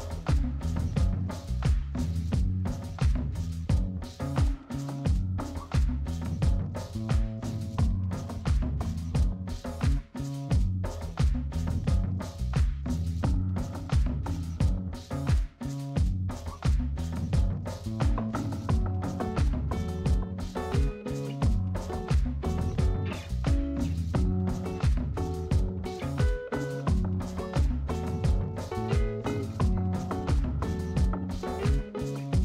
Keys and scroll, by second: 4.7 space, 11.0 space.